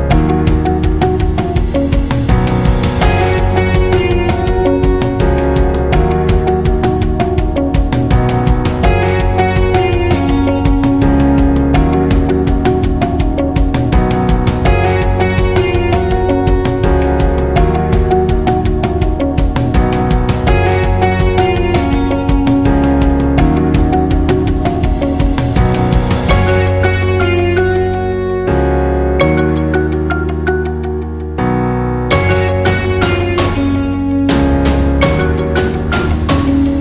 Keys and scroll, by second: 3.9 Left, 4.0 Left, 4.4 Up, 4.4 Right, 4.8 Down, 5.4 Up, 12.3 Down, 35.4 ctrl+z.